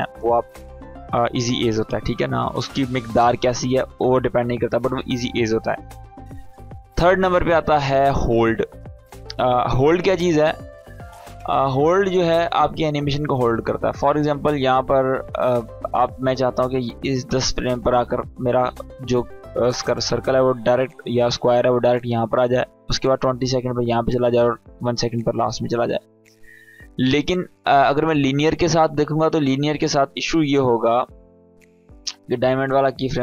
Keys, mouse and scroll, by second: 5.6 click, 12.0-12.9 drag, 22.6-25.1 drag, 27.6-29.7 drag, 32.3 space.